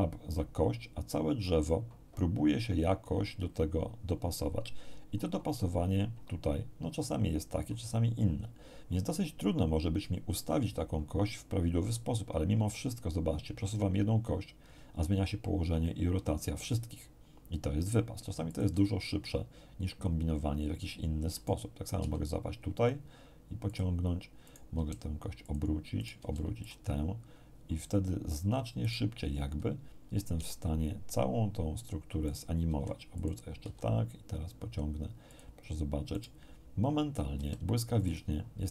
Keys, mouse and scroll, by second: 18.5 click, 21.3 right click, 21.9 g, 23.7 click, 24.4 right click, 24.7 r, 25.4 click, 25.9 right click, 26.1 r, 26.6 click, 28.8 click, 30.3 g, 32.2 click, 32.7 r, 33.1 click, 33.6 g, 35.3 click, 36.1 right click, 37.3 r, 38.0 click.